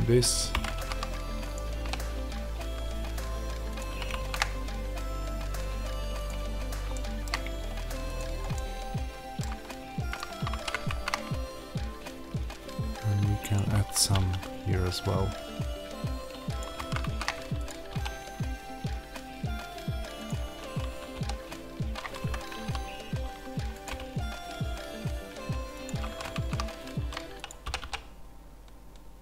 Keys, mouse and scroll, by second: 1.4 click, 1.7 r, 3.7 click, 3.8 g, 6.1 click, 6.4 scroll, 6.8-8.1 shift+middle drag, 7.4-8.1 scroll, 8.1 click, 8.4-10.0 middle drag, 10.0 click, 10.4 alt+d, 13.3 alt+d, 13.4 click, 13.9 r, 16.5 click, 16.7 alt+d, 17.6 click, 17.8 r, 20.2 click, 21.1 r, 22.2 Escape, 22.5 s, 23.7 click, 23.8 g, 25.8 click, 27.4 click, 27.6 r.